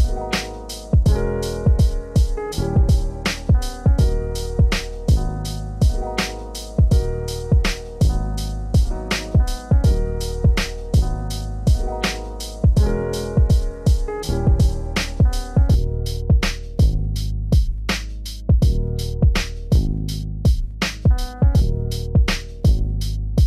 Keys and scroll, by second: 12.5 ctrl+space.